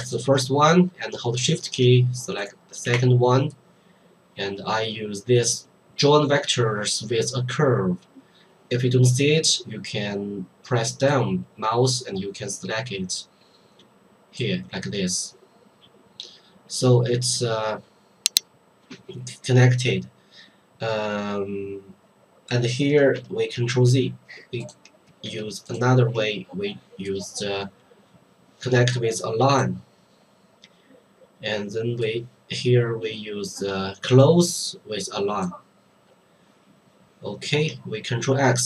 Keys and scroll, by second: 23.7 ctrl+z, 38.3 ctrl+x.